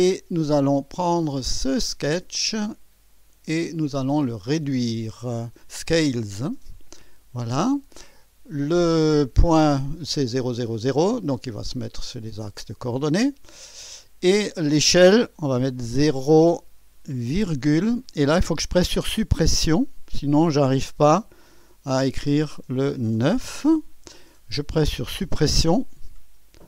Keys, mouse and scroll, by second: 0.2 right click, 1.5 click, 6.5 click, 11.1 click, 15.9 KP_0, 17.4 ,, 22.1 Delete, 23.4 9.